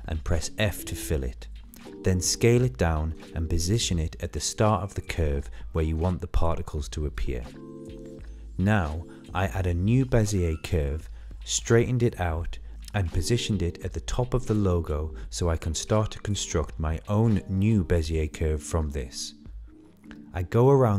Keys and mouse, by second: 0.9 r, 4.0 s, 5.5-5.9 middle drag, 6.2 shift+middle click, 6.4 shift+middle click, 6.7 middle click, 6.9 shift+middle click, 8.2-9.2 middle drag, 10.2 click, 10.5 shift+middle click, 10.8 shift+middle click, 11.5 shift+a, 14.3 r, 15.4 Tab, 16.6 r, 18.5 click, 18.7-20.8 drag.